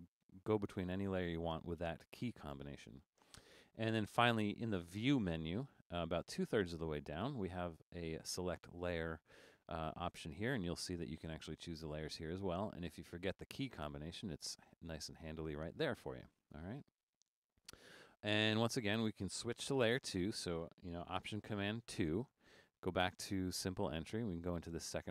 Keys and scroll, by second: 0.2 alt+super+3, 0.6 alt+super+1, 21.9 alt+super+2.